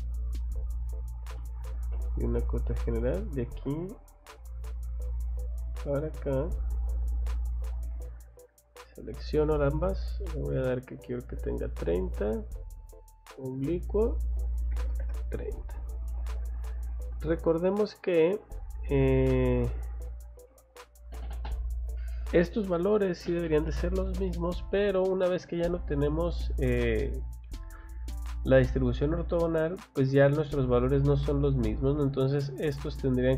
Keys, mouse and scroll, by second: 0.8 click, 1.1 scroll down 2, 1.4 middle click, 2.0 scroll up 2, 3.0 click, 3.2 scroll down 1, 3.7 scroll up 1, 5.5 click, 5.8 scroll down 1, 7.3 click, 7.7 Escape, 8.8 click, 9.0 click, 10.1 click, 11.5 click, 12.7 click, 13.4 click, 16.1 Escape, 16.9 middle click, 17.1 click, 17.3 click, 18.1 click, 20.0 click, 20.3 middle click, 20.5 Escape, 24.3 middle click, 25.6 middle click, 31.2 scroll down 1, 31.6 middle click, 32.8 middle click.